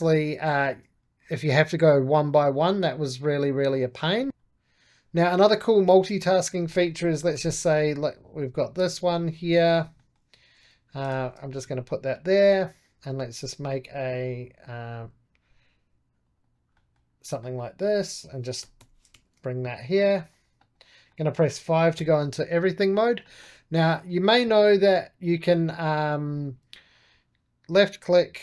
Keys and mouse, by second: 4.1 click, 5.0 middle click, 5.7 4, 5.9 click, 6.6 middle click, 7.2 shift+d, 8.0-9.9 drag, 9.9 middle click, 10.5 g, 11.0 shift+z, 11.9-16.6 drag, 16.6-18.5 middle drag, 18.5 g, 19.0 shift+z, 19.9-21.0 drag, 21.0 middle click, 21.9 5, 22.3-23.6 middle drag, 23.6 click, 24.0-27.2 middle drag, 27.2-28.4 ctrl+drag.